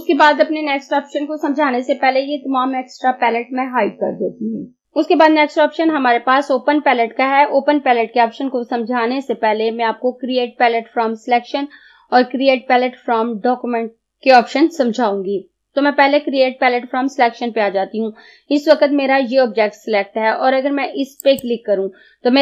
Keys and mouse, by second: 21.3 click.